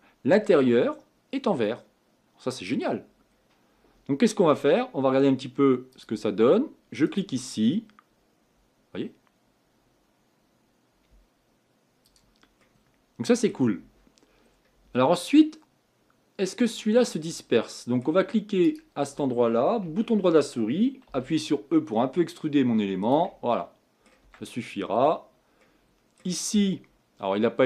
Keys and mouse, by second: 0.0 middle click, 0.8-1.1 middle drag, 1.5 middle click, 3.3-6.1 middle drag, 6.1-7.8 drag, 12.2 click, 13.1 click, 18.6 right click, 19.9 Tab, 21.2 e, 24.3 Tab.